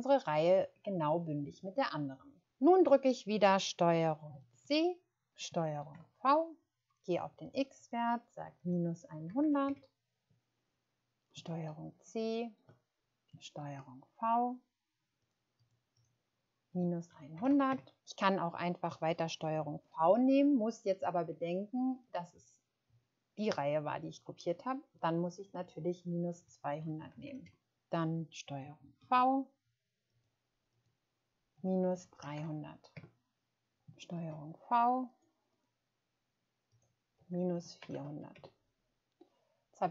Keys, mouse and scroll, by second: 4.6 ctrl+c, 5.8 ctrl+v, 9.3 typing, 9.6 Return, 11.6 ctrl+c, 13.6 ctrl+v, 15.5 click, 17.1-17.5 typing, 17.7 Return, 19.9 ctrl+v, 22.3 click, 25.6 click, 26.4-27.2 typing, 27.4 Return, 29.0 ctrl+v, 31.5-32.9 typing, 32.9 Return, 34.1 ctrl+v, 35.5 click, 37.5-37.9 typing, 38.3 Return.